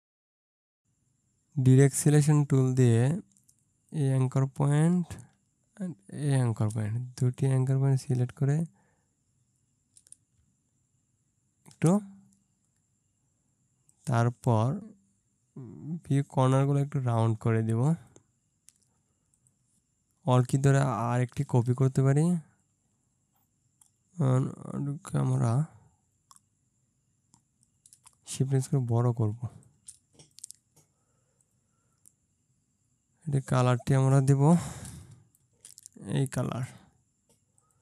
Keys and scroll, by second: 0.7 ctrl+space, 0.8 ctrl+shift+z, 34.9 ctrl+space.